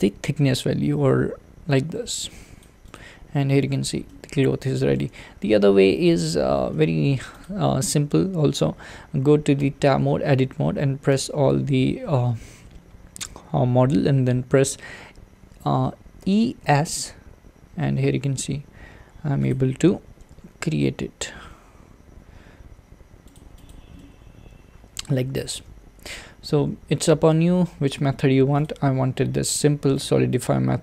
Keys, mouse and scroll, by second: 2.9 click, 3.6-3.9 scroll down 2, 4.1-6.2 middle drag, 6.2-6.7 drag, 6.7 middle click, 7.4 click, 7.8-9.6 middle drag, 9.6 Tab, 10.2-11.1 scroll up 1, 11.1 a, 11.5-16.2 middle drag, 16.2 e, 20.3 g, 23.7 click, 24.0-25.6 middle drag, 25.6 z, 26.0 z, 26.5 z, 27.3 Tab, 30.0-30.8 drag.